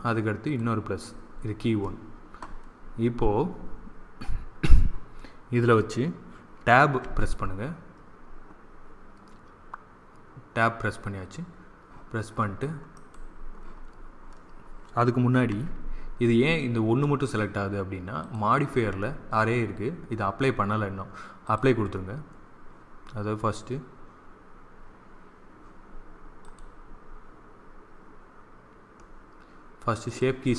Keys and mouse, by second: 6.9 Tab, 12.8-14.7 drag, 15.4 Tab, 18.1-19.9 drag, 21.3-23.2 drag, 26.3-29.5 drag, 29.9-30.5 drag.